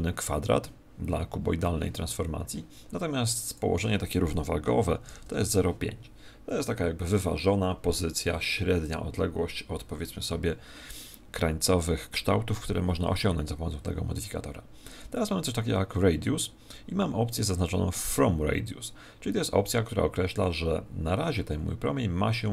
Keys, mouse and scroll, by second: 3.4 click.